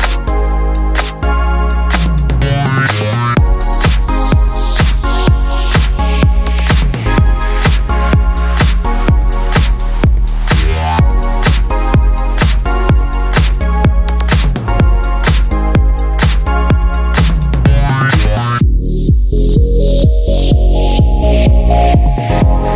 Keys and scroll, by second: 0.0 Tab, 1.4 s, 9.2 Tab, 21.4 s.